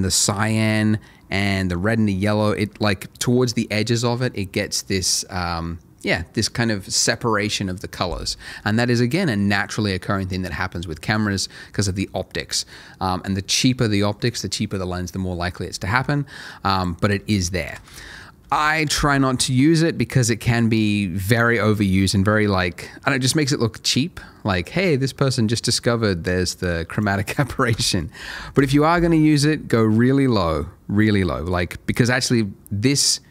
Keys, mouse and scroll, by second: 16.7 click, 17.0 double click, 17.6 BackSpace, 17.8 KP_0, 18.4 KP_1, 18.5 KP_Enter, 21.6 middle click, 25.5 middle click, 26.9 click, 27.3 double click, 27.7 BackSpace, 28.2 KP_0, 28.5 Return, 33.0 middle click.